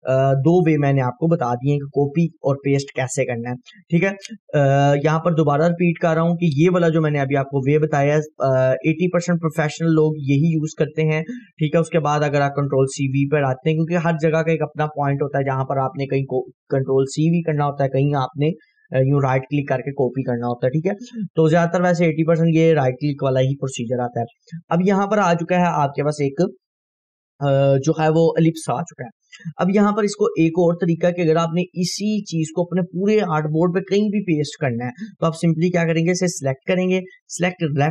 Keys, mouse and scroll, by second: 0.2 click, 2.4 scroll up 1, 4.9 scroll down 1, 5.5 Delete, 7.3-9.5 drag, 10.0 scroll up 1, 30.9 click, 31.3 scroll down 1, 32.3-37.9 drag.